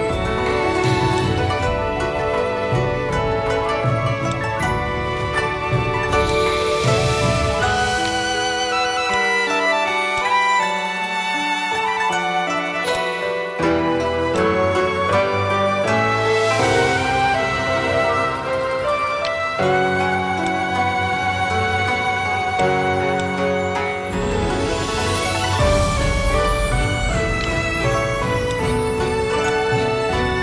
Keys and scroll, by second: 4.6 a, 7.0 v, 12.0-13.3 typing, 19.5 v, 26.3 v.